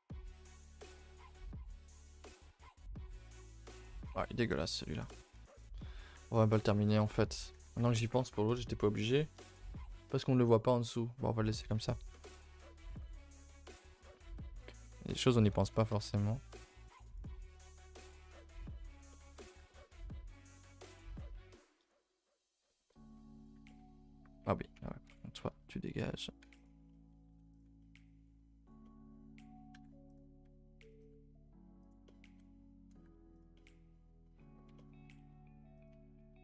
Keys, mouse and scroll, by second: 0.5 scroll up 2, 0.6 a, 0.8 a, 1.0 3, 1.9 alt+click, 2.5 x, 2.8 2, 4.0 alt+Left, 4.6 alt+Left, 5.0 x, 5.4-6.1 scroll down 5, 6.1 Tab, 6.2-6.7 middle drag, 6.7 scroll down 2, 6.9 middle click, 7.1 a, 7.3 a, 11.7 Tab, 12.1 middle click, 12.3 a, 12.5 a, 12.6-14.6 middle drag, 14.6-14.9 scroll up 2, 14.9 middle click, 15.1 scroll up 1, 15.2 scroll down 1, 15.5 shift+middle click, 15.9 a, 16.0 a, 16.1 middle click, 16.2 scroll up 2, 16.9 alt+Left, 17.6 right click, 17.8 scroll down 2, 18.0 a, 18.2 a, 18.3-19.3 middle drag, 19.3-20.5 scroll up 5, 19.6 shift+middle drag, 20.5 click, 20.8 shift+click, 21.2 shift+click, 22.4 right drag, 22.6-23.1 shift+middle drag, 23.1-23.4 scroll up 1, 23.4 alt+click, 23.6-24.7 middle drag, 24.7-27.2 typing, 26.9-27.2 middle drag, 27.8-29.7 middle drag, 29.7 e, 32.0 middle click, 32.9 g, 33.5-35.0 middle drag, 35.0 s, 35.9 a, 36.1 a.